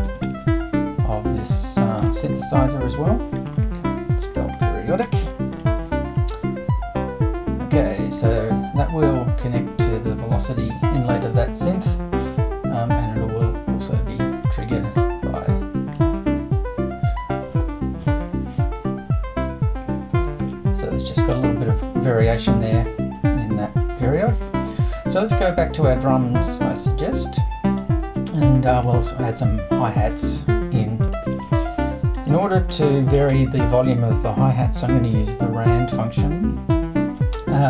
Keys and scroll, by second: 0.0-0.8 typing, 5.0 r, 31.3 super+l, 32.5-33.8 typing, 35.1 space.